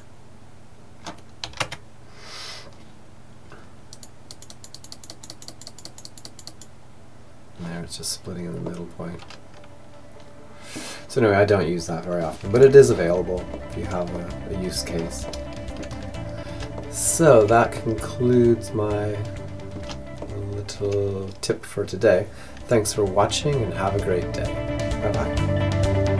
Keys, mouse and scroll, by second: 3.1-7.1 drag, 7.6-9.6 middle drag, 11.6-13.3 drag, 12.5-18.6 middle drag, 19.3-21.1 middle drag.